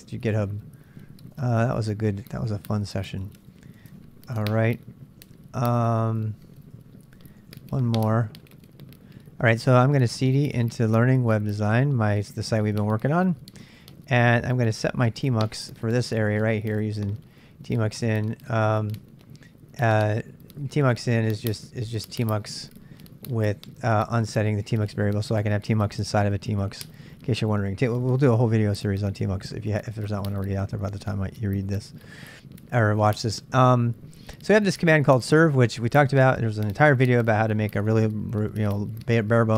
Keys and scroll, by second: 0.3 Return, 1.9-4.3 typing, 5.1 ctrl+a, 5.4 w, 6.8 Return, 7.4-13.2 typing, 14.2-16.5 typing, 20.2-23.4 typing, 23.8 ctrl+[, 23.9 ctrl+j, 24.6 shift+z, 24.9 shift+z, 32.0-32.8 typing.